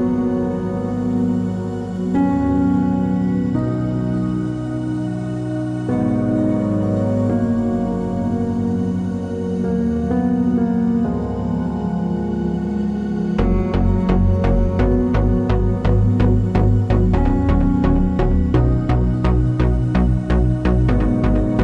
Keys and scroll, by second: 1.1-1.9 typing, 9.3 Left, 11.4-12.8 typing.